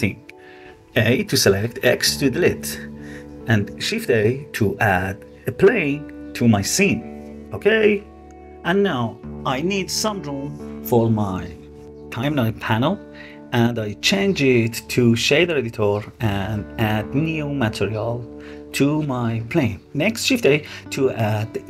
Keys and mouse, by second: 1.1 x, 3.4 shift+a, 7.0-7.4 middle drag, 9.4-12.3 drag, 13.4-14.8 drag, 16.3-17.7 drag, 19.0 shift+a.